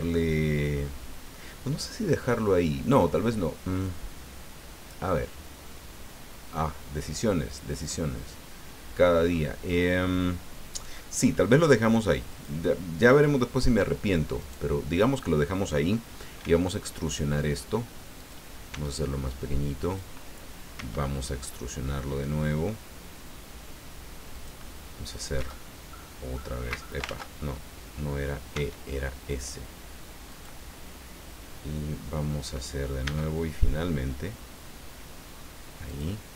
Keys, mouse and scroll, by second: 12.3 click, 13.0 click, 14.4 right click, 16.4 e, 18.2 click, 18.7 s, 19.8 click, 20.7 e, 24.3 click, 25.3 e, 26.7 Escape, 27.0 ctrl+z, 28.5 s, 30.3 click, 33.0 e, 35.9 click.